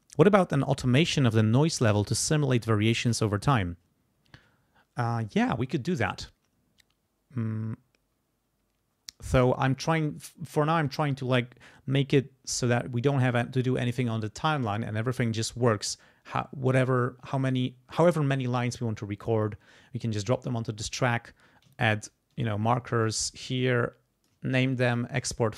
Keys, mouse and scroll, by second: 22.1 ctrl+click, 23.4 ctrl+click, 24.7-25.1 ctrl+scroll up 2.